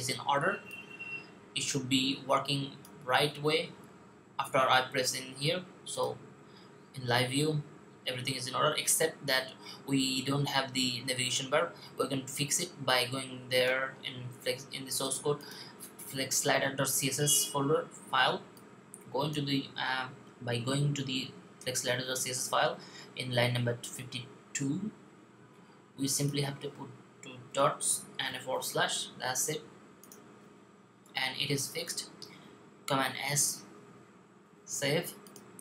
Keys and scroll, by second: 27.3-28.1 typing, 32.9 super+s.